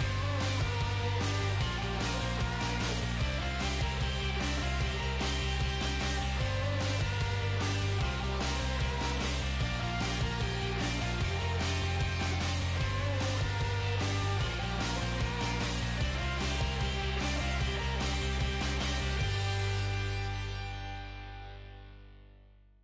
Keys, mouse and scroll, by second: 1.6-5.4 right drag, 2.6 g, 3.7 g, 5.4-6.4 middle drag, 6.9 g, 8.4 middle click, 8.7 middle click, 11.4 middle click, 12.6-14.2 right drag, 12.8-14.6 middle drag, 14.7 g, 16.1-20.7 right drag, 16.4 g, 17.5 g, 18.4-20.1 middle drag, 19.4 g, 22.2 g.